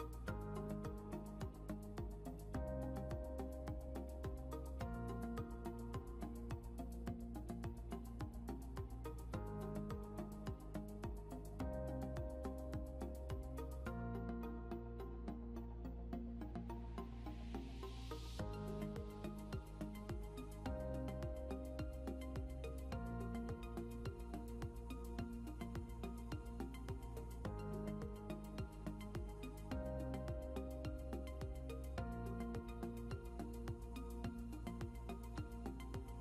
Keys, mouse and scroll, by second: 1.5 click, 5.1 click, 12.5 click, 16.0 click, 26.5 click, 29.9 click, 31.7 ctrl+c, 33.6 click, 34.9 ctrl+v.